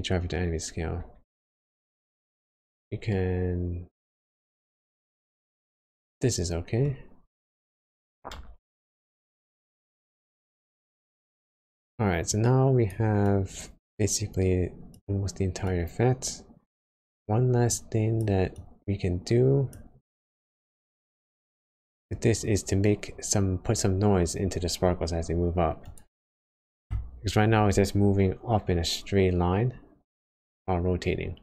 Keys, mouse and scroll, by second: 2.2-2.6 scroll down 4, 3.1 middle click, 4.2 scroll up 2, 4.9 scroll down 1, 5.1 scroll down 1, 6.7 middle click, 8.3 space, 9.9-10.3 scroll up 1, 10.3-10.9 scroll down 3, 11.1 middle click, 11.7 scroll up 1, 11.9 scroll down 1, 12.2 click, 13.2 click, 26.5 scroll down 1, 28.6 space, 31.1 space.